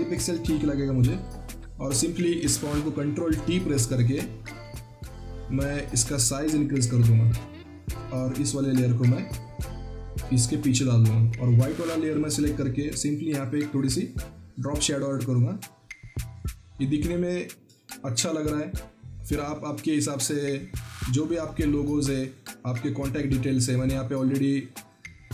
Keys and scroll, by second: 3.0 ctrl+t.